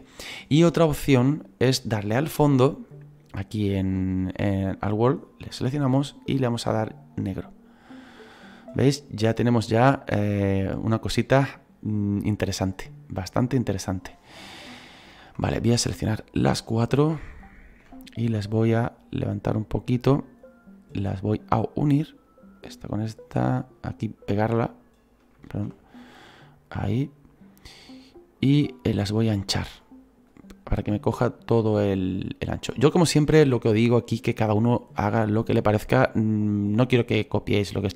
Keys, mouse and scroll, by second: 7.4 click, 15.3-18.4 right drag, 18.4-20.7 drag, 20.7 right click, 21.6 click, 22.6 right click, 23.1-24.5 drag, 24.5 right click, 25.5 ctrl+z, 25.9-28.1 drag, 28.1-30.4 shift+right drag, 30.4-37.9 drag.